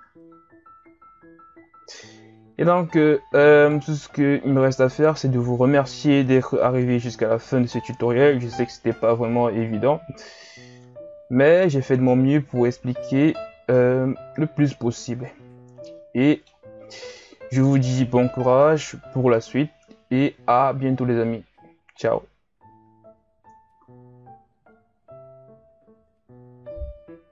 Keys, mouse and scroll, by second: 0.7 KP_1, 1.1-2.8 scroll down 2, 2.8-3.6 shift+scroll up 2, 3.6 right click, 4.1-5.1 scroll up 3, 5.1-5.7 scroll up 1, 5.7 s, 8.0 a, 8.3-9.3 scroll down 4, 9.3-10.7 shift+scroll down 3, 10.7 ctrl+s, 12.5-13.1 scroll down 5, 13.1-13.7 scroll up 4, 13.7-14.3 scroll down 5, 14.3-16.9 middle drag, 16.9 scroll down 1, 17.1-18.5 middle drag, 18.5 KP_1, 19.6-22.8 shift+scroll up 5, 23.8 ctrl+s.